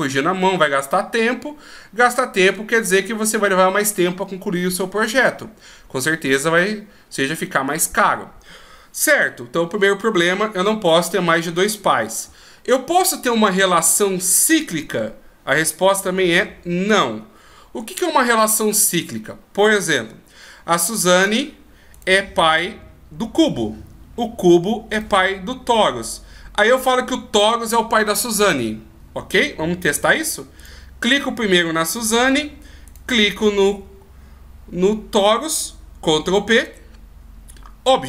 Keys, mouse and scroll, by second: 21.2 right click, 21.9 right click, 22.7-24.9 scroll down 1, 24.9 right click, 30.6 right click, 32.8 shift+right click, 36.5 ctrl+p.